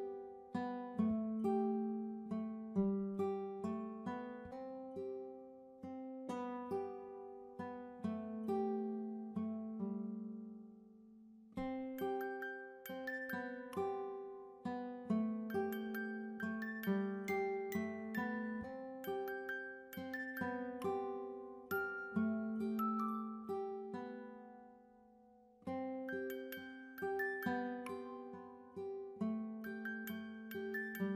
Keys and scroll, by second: 4.8-5.2 typing.